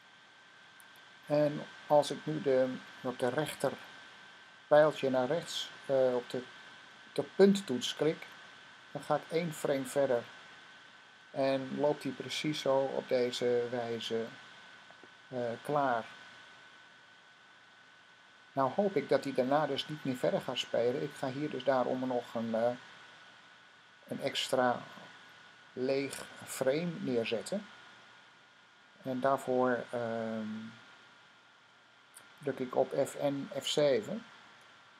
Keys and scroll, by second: 7.4 ▪, 34.3 F7.